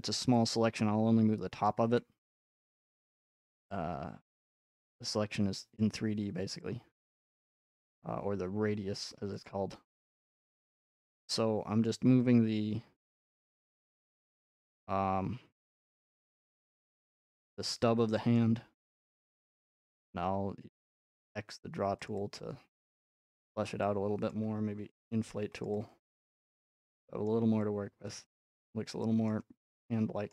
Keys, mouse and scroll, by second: 0.1 click, 1.7 click, 2.3 f, 3.1 click, 6.2-11.1 drag, 11.8 middle click, 11.8-12.2 scroll up 8, 13.5 alt+middle click, 13.7 alt+middle click, 14.3-14.8 scroll up 5, 18.4-18.7 scroll, 19.6 scroll, 21.7 typing, 22.1-23.4 drag, 23.4 middle click, 24.3 click, 25.0 typing, 25.6 click, 26.5 click, 27.3 middle click, 29.3 middle click.